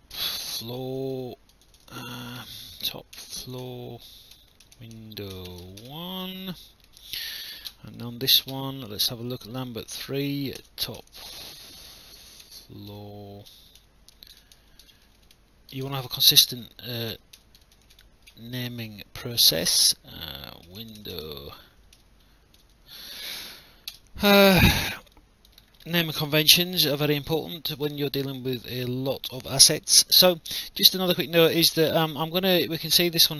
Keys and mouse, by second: 0.0-6.7 typing, 6.9 Return, 8.0 click, 9.9 click, 10.6 BackSpace, 10.9 t, 12.2-15.8 typing, 17.1-18.8 typing, 20.4-22.6 typing, 23.9 Return, 25.2 alt+click, 26.2 alt+middle click, 26.7 alt+click, 27.1 alt+middle click, 27.5 alt+click, 28.0 alt+middle click, 28.6 alt+click, 29.6 alt+click, 31.0 alt+middle click, 31.3 click.